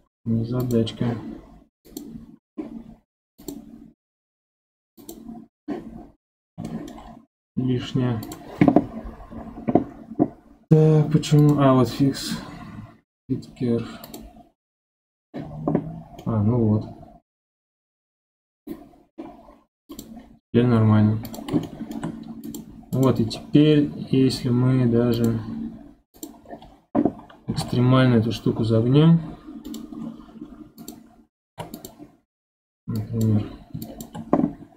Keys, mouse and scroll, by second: 0.6 click, 1.8 click, 3.4 click, 5.0 click, 5.9 scroll up 6, 6.6-7.0 shift+middle drag, 7.0-8.2 scroll down 3, 8.2 click, 8.9-11.4 scroll down 8, 11.4-14.5 drag, 16.2-19.2 middle drag, 19.9 click, 21.2 click, 21.6-22.4 shift+middle drag, 22.4 click, 22.9 click, 23.3 scroll down 1, 23.6-25.1 scroll up 5, 25.1 click, 26.1 click, 26.4-27.5 scroll down 6, 27.5 g, 30.0 scroll up 1, 30.8 click, 31.4 ctrl+Tab, 32.1 scroll up 4, 33.0 click.